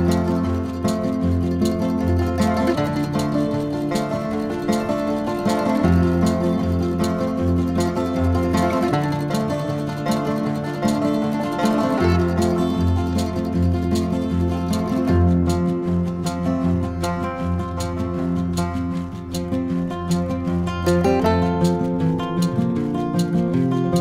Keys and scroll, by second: 1.3 4, 12.3 n, 23.2 t.